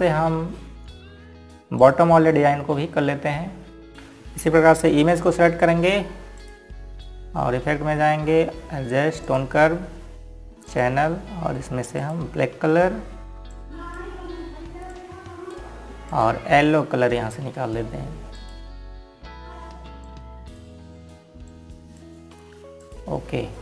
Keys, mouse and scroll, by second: 1.1 scroll down 1, 3.5 click, 5.3 click, 10.9 click.